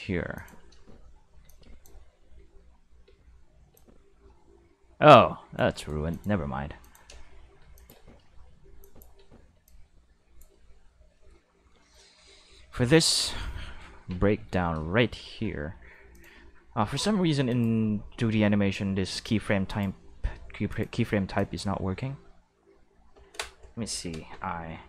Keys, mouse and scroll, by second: 0.3 click, 0.7-3.7 typing, 1.4 click, 3.7-5.5 drag, 5.7 right click, 6.0 x, 6.1 click, 6.8 click, 7.1-9.5 typing, 7.7 click, 8.8 click, 9.6-10.4 drag, 11.9 shift+middle click, 13.1 q, 13.6 shift+middle drag, 13.9 Tab, 14.4 shift+middle click, 14.9 Tab, 16.1 click, 17.5 click, 19.6 click, 20.7 click, 21.3 click, 23.8 i.